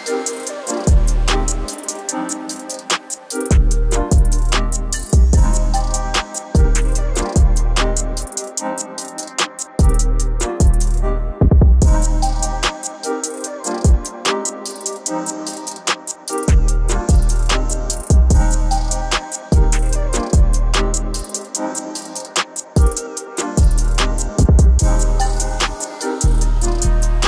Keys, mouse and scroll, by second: 0.2 right click, 2.8 click, 4.9-8.7 drag, 6.8-7.8 typing, 8.7 right click, 10.1-13.2 drag, 13.2 ctrl+z, 13.7 right click, 14.8-21.6 drag, 20.1 typing, 20.3 Return, 22.3-25.4 drag, 24.2 middle click, 25.4 middle click, 26.7-27.2 drag.